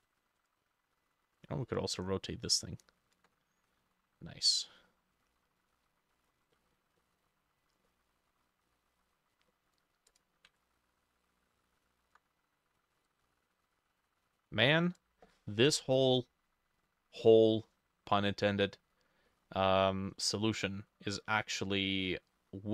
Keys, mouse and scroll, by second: 1.4 ctrl+click, 3.7 middle click, 3.9 scroll down 1, 4.5 middle click, 4.8-5.3 scroll down 5, 5.3 middle click, 5.8 middle click, 6.2 middle click, 6.6 middle click, 7.0 middle click, 7.3-7.9 scroll up 7, 7.9 middle click, 9.4 middle click, 10.6 ctrl+click, 19.3 middle click, 20.5 middle click, 21.5-22.2 scroll down 1, 22.3 middle click.